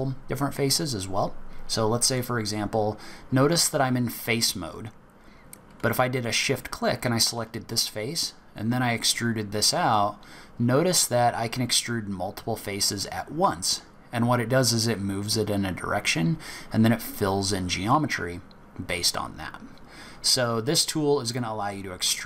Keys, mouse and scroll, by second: 2.1 click, 6.2 shift+click, 7.6 click, 19.5-20.2 scroll down 1, 20.2-20.5 scroll up 1.